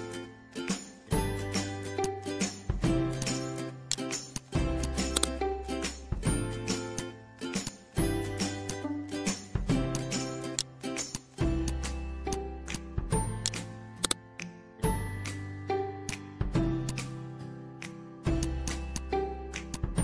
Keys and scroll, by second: 0.9 ctrl+c, 1.6 ctrl+v, 5.5 ctrl+a, 6.1 ctrl+v, 14.5 ctrl+a, 15.0 ctrl+v, 17.4 ctrl+a.